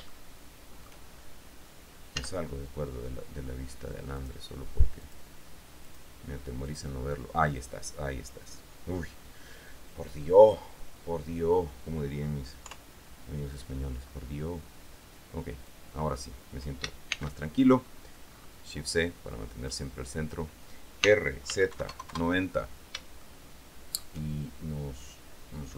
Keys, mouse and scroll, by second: 0.2-1.6 shift+middle drag, 2.3 z, 4.4 click, 5.2 click, 6.0 click, 6.8 middle click, 6.8 click, 12.8 KP_3, 14.2-15.1 scroll down 2, 15.8-17.2 drag, 17.2 shift+c, 17.8-18.8 shift+scroll up 1, 18.8 scroll up 1, 19.8 click, 21.2-22.5 typing, 23.4 shift+middle click.